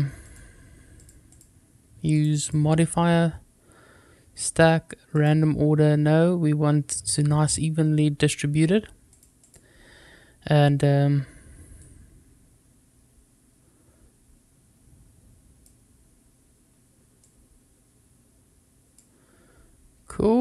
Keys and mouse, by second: 0.1 click, 0.8 click, 1.2 click, 2.0 click, 2.3 click, 5.0 click, 9.0 click, 9.3 click, 11.7-15.5 drag, 17.2-18.9 drag.